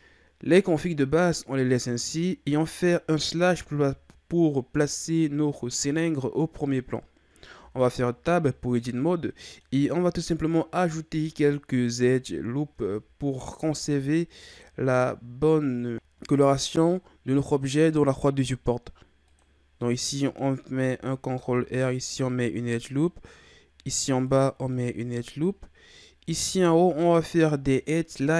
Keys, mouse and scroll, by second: 3.5 KP_Divide, 7.6 Tab, 8.2-9.0 scroll down 3, 9.0-10.3 middle drag, 10.3-13.3 scroll up 1, 13.6 ctrl+r, 19.9-21.3 middle drag, 21.3 ctrl+r, 24.7-26.2 middle drag, 26.2 ctrl+Tab.